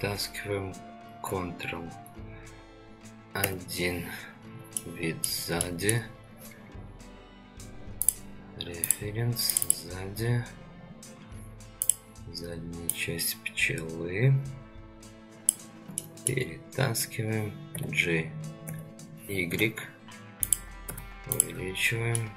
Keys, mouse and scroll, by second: 3.4 ctrl+KP_1, 4.4 scroll down 2, 4.7 shift+middle click, 5.6-5.9 middle drag, 16.0-16.3 middle drag, 17.7 g, 20.9 s, 22.2-22.3 middle drag.